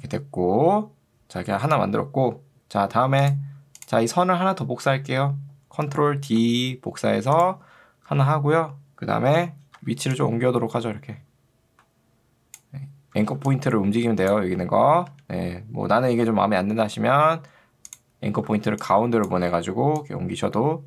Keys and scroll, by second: 6.5 ctrl+d, 8.1 v, 13.3 ctrl+2, 15.1 Escape, 18.7 ctrl+2, 19.5 Escape.